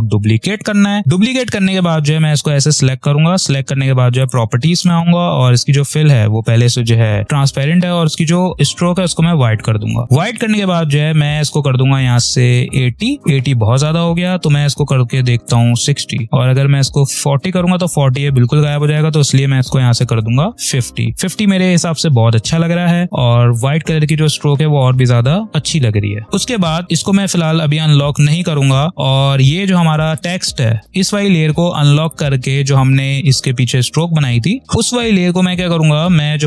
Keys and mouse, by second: 7.2 click, 8.6 click, 12.6 click, 19.7 5, 20.5 click, 21.9-24.3 typing, 22.1 click, 23.5 click, 24.0 click, 24.0 click, 30.1-36.4 drag.